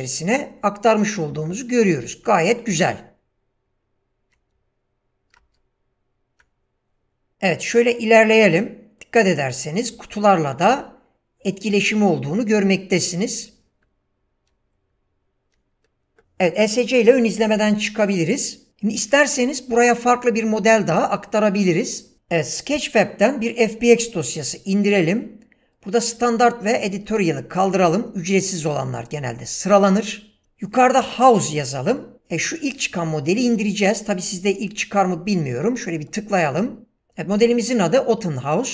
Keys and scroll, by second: 2.0 w, 2.7 space, 4.5 w, 5.4 space, 7.3 w, 30.4 typing.